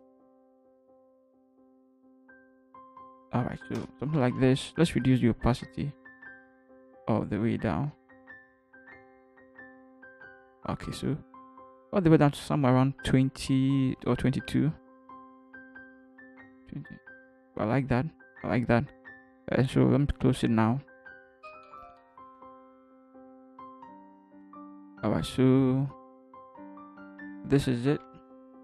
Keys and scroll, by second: 3.8 ctrl+Return, 28.4 ctrl+h.